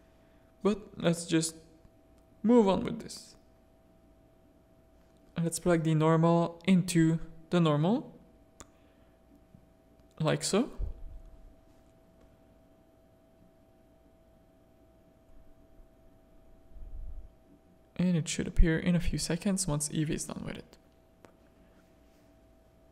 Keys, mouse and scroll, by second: 2.7 click, 5.0-9.2 middle drag, 9.2 middle click, 11.5-12.3 middle drag, 13.5-14.0 middle drag, 15.0-21.7 middle drag, 21.7 click.